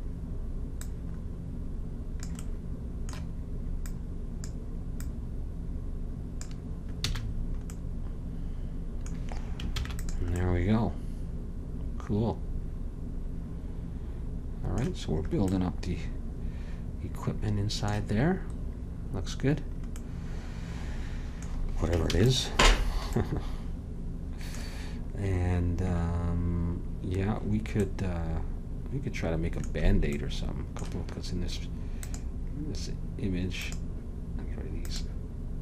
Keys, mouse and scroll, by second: 0.9-2.6 drag, 2.5 middle click, 3.9-7.0 drag, 7.2 a, 7.5-9.9 middle drag, 9.9 ctrl+s, 15.6-17.4 middle drag, 22.2 ctrl+s.